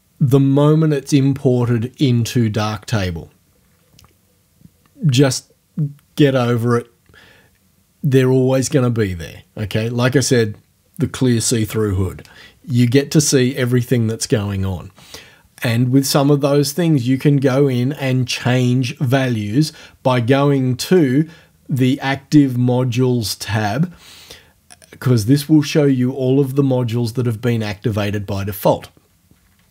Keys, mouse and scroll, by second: 20.9 click.